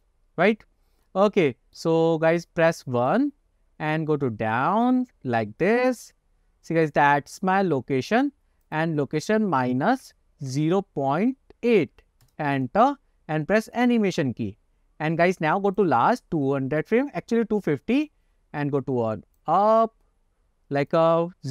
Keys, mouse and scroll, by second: 0.7 scroll up 1, 1.2-1.9 middle drag, 2.1-2.8 scroll down 1, 3.2 KP_1, 4.0-6.0 drag, 7.8-8.7 scroll down 1, 8.7-12.4 drag, 13.9 click, 15.8 click, 18.2-19.5 drag, 21.0-21.5 drag.